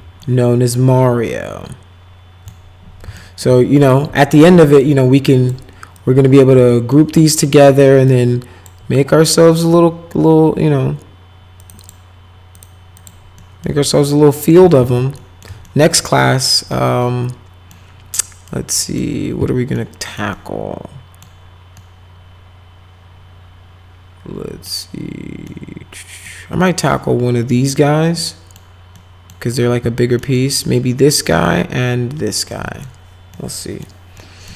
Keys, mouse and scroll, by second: 0.2-2.5 alt+middle drag, 3.2 alt+middle click, 4.6 alt+middle click, 5.3 click, 5.9 click, 6.7 alt+middle click, 7.2 middle click, 8.1 shift+click, 11.6 click, 11.8 click, 12.5 click, 13.0 click, 13.4 middle click, 13.9 alt+middle click, 14.8 ctrl+z, 15.2 middle click, 15.6 alt+middle click, 16.3 middle click, 16.7 middle click, 18.2 middle click, 18.8 middle click, 19.8 middle click, 20.3 middle click, 21.8-24.6 middle drag, 25.5 middle click, 26.7 middle click, 28.2 middle click, 29.0 middle click, 30.2 middle click, 31.2 middle click, 32.5 middle click, 33.3 middle click, 34.2 middle click.